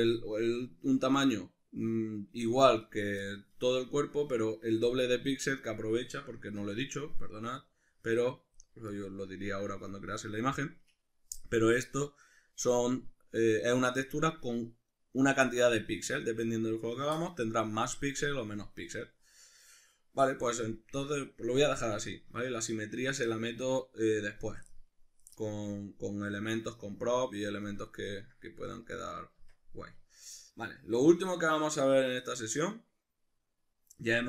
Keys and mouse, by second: 6.4 Tab, 7.1 click, 7.6-9.0 drag, 9.0-21.3 middle drag, 22.3 Tab, 26.4-28.0 drag, 28.0-34.2 ctrl+middle drag, 29.4 Tab.